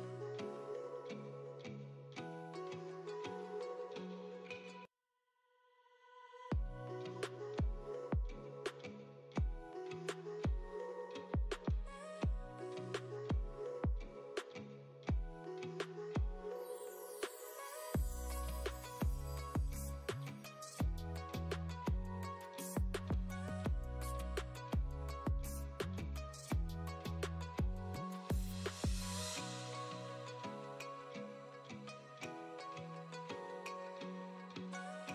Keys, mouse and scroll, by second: 0.8 shift+click, 1.1 click, 1.5 click, 2.1 ctrl+z, 2.6 click, 2.8 click, 3.0 click, 3.4 click, 3.6 click, 3.8 click, 4.1 click, 4.3 click, 4.9 click, 5.4 click, 5.6 click, 5.8 click, 6.1 click, 6.3 click, 6.6 right click, 6.8-8.0 typing, 6.9 click, 7.9 click, 8.5 shift+scroll up 2, 8.9 shift+click, 9.3 click, 9.4 v, 9.8 click, 10.0 click, 10.1 e, 10.3 click, 10.6 click, 10.7 click, 10.8 h, 11.1 click, 11.4 click, 11.6 click, 11.8 click, 11.9-13.2 typing, 12.0 click, 13.1 click, 14.2 click, 14.6 click, 14.9 click, 15.2 click, 15.5 right click, 16.0 click, 16.2 click, 16.6 click, 16.7 s, 17.0 scroll up 1, 17.6 click, 17.8 click, 18.0 click, 18.0 s, 18.8 click, 19.6 click, 19.8 click, 20.2-25.9 typing, 21.4 click, 21.6 click, 22.7 click, 23.3 click, 23.5 click, 24.5 click, 24.7 click, 25.7 click, 25.9 Return, 26.8 click, 27.1 click, 27.7 click, 28.5 ctrl+r, 28.9 click, 31.3 click, 32.3 ctrl+r, 32.5 click, 32.5-35.1 typing, 33.4 click, 34.9 shift+click.